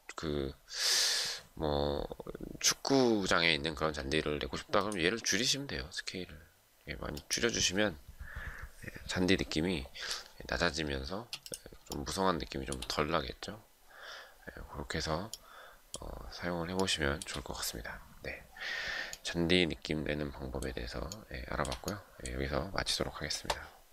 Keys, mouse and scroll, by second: 10.8 space, 11.5 shift+middle click, 16.4 shift+middle click, 20.8 shift+middle click.